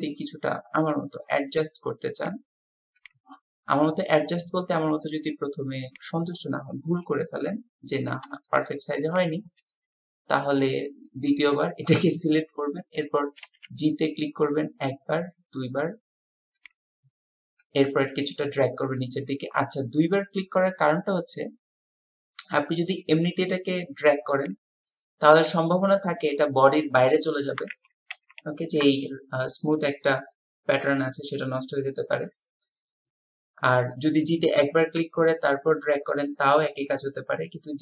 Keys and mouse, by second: 0.7-1.1 drag, 4.3 click, 7.0 click, 7.9 click, 8.5 shift+click, 9.1 shift+click, 9.7-10.8 drag, 11.1 click, 13.4 g, 17.6-18.7 drag, 23.1-23.7 drag, 24.9-26.5 drag, 27.1-27.6 drag, 27.7 ctrl+z, 29.3 typing, 31.7-34.0 middle drag, 34.2-34.7 middle drag.